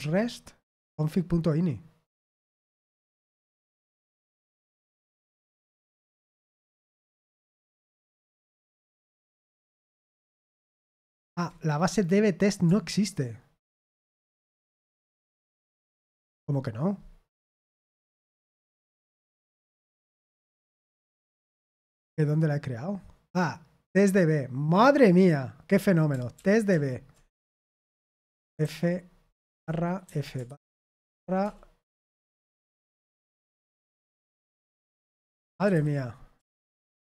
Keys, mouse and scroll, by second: 2.7 super+8, 3.8 super+7, 4.6 Return, 11.2 ctrl+c, 15.3 super+8, 19.7 click, 20.4 click, 25.0 click, 26.3 ctrl+p, 26.7 ctrl+p, 27.4 Return, 28.6-37.1 typing, 36.5 Return.